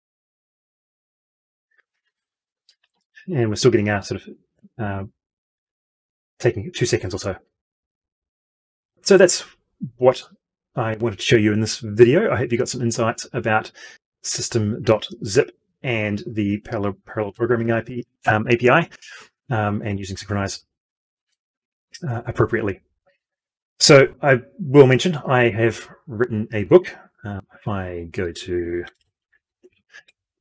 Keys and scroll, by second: 28.7 ctrl+t.